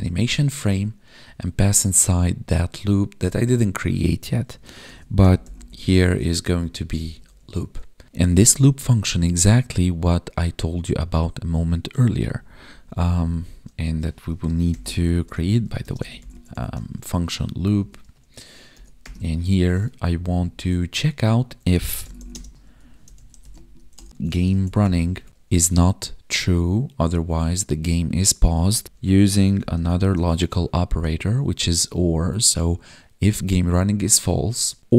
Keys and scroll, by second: 0.0 Down, 0.2 Tab, 6.2 ctrl+s, 6.6 Right, 7.3 ctrl+s, 12.2 Left, 12.5 Down, 15.8 space, 17.8 Right, 20.0 ctrl+Down, 22.3 space, 25.1 Tab, 28.8 space, 30.0 space.